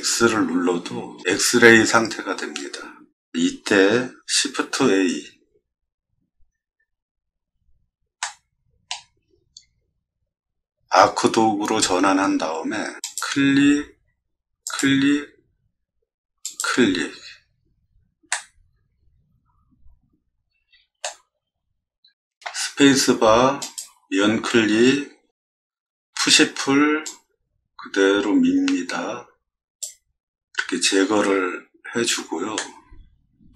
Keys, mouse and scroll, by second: 4.6 shift+a, 7.2 middle click, 7.5 scroll up 1, 8.2 middle click, 9.2 scroll up 1, 9.2 middle click, 9.4 middle click, 13.0 click, 14.6 click, 16.4 click, 18.3-21.0 middle drag, 22.6 space, 23.6 click, 26.1 p, 27.0-29.8 drag, 32.5 middle click.